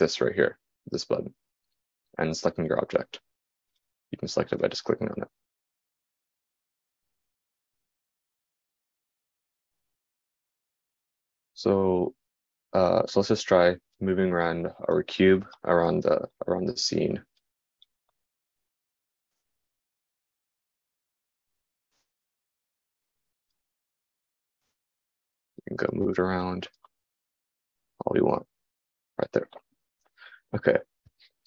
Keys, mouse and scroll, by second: 7.4-25.4 drag.